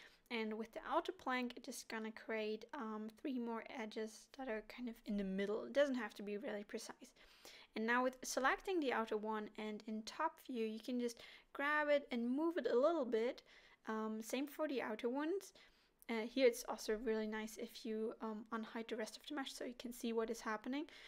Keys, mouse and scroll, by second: 3.0 middle click, 5.6 click, 6.3 middle click, 7.1 KP_7, 8.3 g, 10.5 middle click, 11.9 click, 12.7 KP_7, 14.0 alt+h, 15.5 g, 17.3 middle click, 18.2 alt+a, 18.7 middle click, 19.4-20.1 scroll down 1, 20.1 click, 20.7 click.